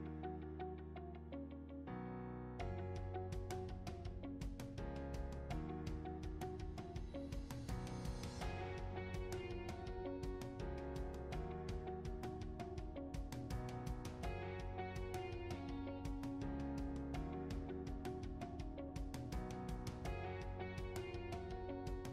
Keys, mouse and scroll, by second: 0.0-5.8 typing, 0.1 alt+click, 0.2 alt+click, 0.5 alt+click, 0.8-1.2 scroll up 2, 0.9 alt+click, 1.0 alt+middle click, 1.1 alt+click, 1.2 ctrl+r, 1.4 click, 1.6 alt+click, 1.8 alt+click, 2.0 alt+middle click, 2.1 alt+middle click, 2.2 scroll up 2, 2.3 click, 2.6 alt+click, 2.6 scroll down 2, 2.7 alt+middle click, 2.7 alt+click, 2.9 alt+click, 3.1 click, 3.4 click, 3.7 shift+right click, 3.9 alt+click, 3.9 scroll up 1, 4.0 alt+middle click, 4.2 click, 4.7 alt+middle click, 4.7 alt+click, 4.9 shift+right click, 5.1 alt+middle click, 5.2 alt+shift+click, 5.3 shift+right click, 5.5 alt+click, 5.8 click, 6.1 ctrl+r, 6.2 alt+click, 6.2 alt+middle click, 6.3 alt+middle click, 6.4 scroll up 3, 6.4 alt+click, 6.4 alt+middle click, 6.6 click, 6.7 click, 7.0 g, 7.2 f, 7.3 alt+click, 7.4 alt+middle click, 7.5 alt+middle click, 7.6 scroll down 2, 7.7 alt+click, 8.0 ctrl+r, 8.2 ctrl+r, 8.3 alt+shift+click, 8.6 alt+middle click, 8.9 Delete, 9.1 click, 9.2 g, 9.4 alt+click, 9.5 g, 9.6 2, 9.7 shift+click, 9.8 shift+click, 9.9 shift+right click, 10.1 alt+click, 10.1 alt+middle click, 10.3 scroll up 1, 10.6 alt+click, 10.7 alt+middle click, 10.8 alt+click, 10.9-13.3 typing, 11.3 click, 11.7 ctrl+r, 11.8 alt+middle click, 12.2 alt+middle click, 12.3 scroll up 1, 12.4 alt+click, 12.5 ctrl+r, 12.7 Delete, 13.1 shift+right click, 13.3 click, 13.5 alt+click, 13.6 scroll down 4, 13.7 alt+click, 13.7 alt+middle click, 13.8 alt+click, 13.8 scroll up 1, 13.9 alt+click, 14.3 alt+middle click, 14.3 alt+click, 14.4 alt+middle click, 14.5 alt+click, 14.5-15.0 typing, 14.6 alt+middle click, 14.8 click, 15.2 ctrl+click, 15.3 shift+right click, 15.5 alt+middle click, 15.6 alt+click, 15.8 alt+middle click, 15.9 scroll up 1, 16.0 ctrl+r, 16.1-17.9 typing, 16.6 shift+right click, 17.1 alt+middle click, 17.2 scroll down 1, 17.2 alt+click, 17.3 alt+middle click, 17.5 click, 17.7 click, 18.0 shift+click, 18.3 shift+right click, 18.5 alt+click, 18.5 alt+middle click, 18.6 shift+right click, 18.8 alt+click, 18.8 scroll up 2, 18.8 alt+middle click, 18.9 g, 19.1 ctrl+r, 19.3 alt+middle click, 19.3 alt+click, 19.6 f, 19.8 alt+middle click, 19.8 ctrl+z, 19.9 alt+click, 20.2 ctrl+r, 20.5 alt+click, 20.6-22.1 typing, 20.8 alt+click, 20.8 alt+middle click, 20.8 scroll up 3, 20.9 alt+click, 21.1 alt+middle click, 21.2 scroll down 1, 21.5 click, 21.6 alt+middle click, 21.8 alt+click, 21.8 alt+middle click.